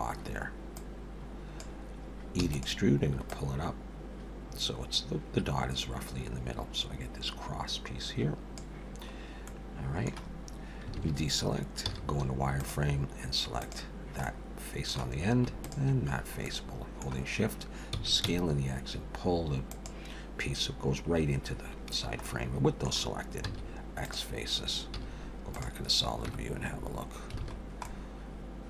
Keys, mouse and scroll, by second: 0.8 click, 2.4 e, 3.3 click, 9.5 middle click, 11.0 alt+a, 11.8 z, 13.6 click, 14.2 middle click, 15.6 shift+click, 16.1 scroll down 3, 16.4 middle click, 17.9 s, 22.2 middle click, 23.5 x, 24.9 z, 26.3 Tab, 27.5 alt+a, 27.6-28.3 scroll down 2, 27.8 middle click.